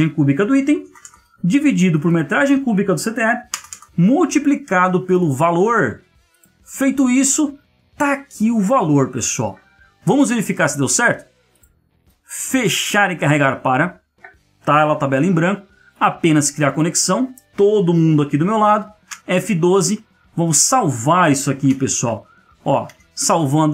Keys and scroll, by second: 0.8 space, 1.0 space, 3.5 space, 3.6 space, 19.0 F12, 22.9 ctrl+v.